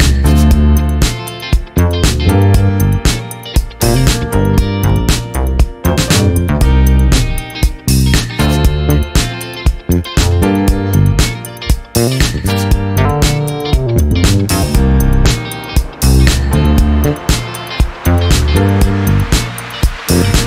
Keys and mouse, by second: 0.4 click, 1.0 click, 5.1 click, 8.6 click, 10.0 F11, 11.2 click, 11.8 space, 14.6 space, 17.6 -, 18.4 space, 20.1 space.